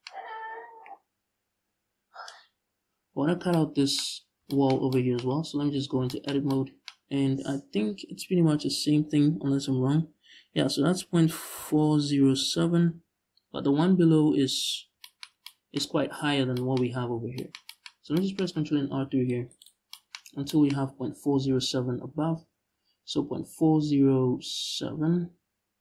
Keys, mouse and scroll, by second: 5.2 Tab, 15.8-16.2 scroll down 2, 17.6 scroll up 1, 18.5 ctrl+r, 19.2 click, 19.8-20.1 scroll up 1, 20.5-20.9 scroll up 1, 20.9 g.